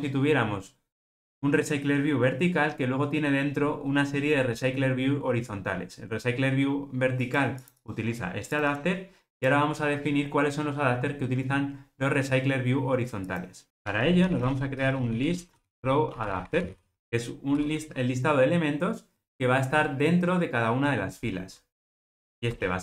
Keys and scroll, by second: 17.5 Escape.